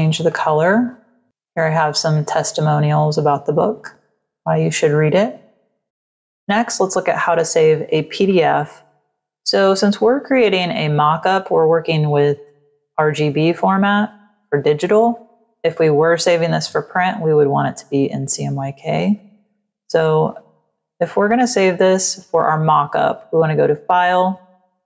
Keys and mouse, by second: 0.2 click, 1.3 click, 2.5 click, 3.7 click, 5.6 click, 20.2 click.